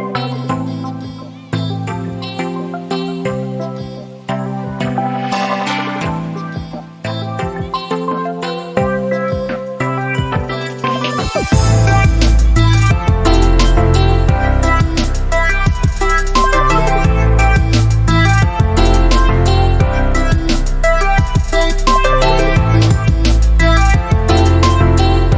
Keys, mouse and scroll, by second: 3.8 click, 11.0 click, 13.0 click, 19.4 alt+click.